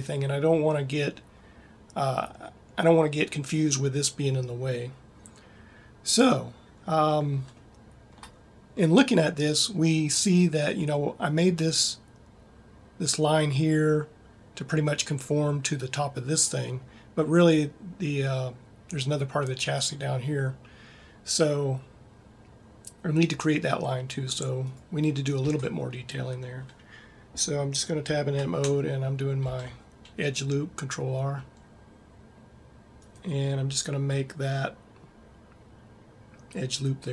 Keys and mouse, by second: 25.9 Tab, 30.0 ctrl+r.